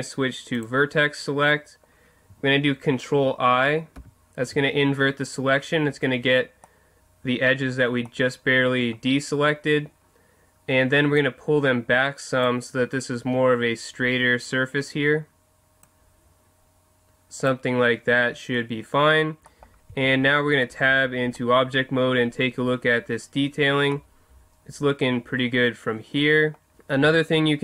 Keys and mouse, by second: 0.6-2.4 drag, 4.0 ctrl+i, 6.6-11.2 middle drag, 11.2-12.9 drag, 15.9-17.6 drag, 19.9 Tab, 23.1-24.0 middle drag, 26.7 Tab, 27.0 Tab.